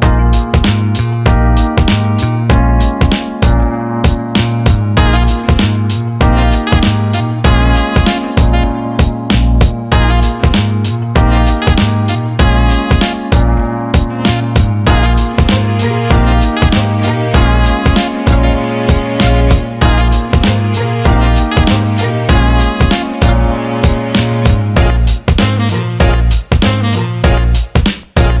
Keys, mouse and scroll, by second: 0.1 alt+middle click, 1.4 alt+middle click, 1.8 alt+middle click, 3.1-5.5 drag, 5.7 alt+shift+middle click, 6.0 click, 6.3-7.5 alt+middle drag, 7.7 alt+shift+middle click, 8.0-13.3 alt+middle drag, 13.9 click, 14.6 alt+middle click, 15.1 click, 15.4 alt+middle click, 16.4 click, 18.3 Tab, 18.8 alt+middle click, 19.7 alt+middle click, 20.1 ctrl+alt+middle click, 20.5 alt+middle click, 21.5 click, 22.9 shift+click, 23.7-27.9 right drag.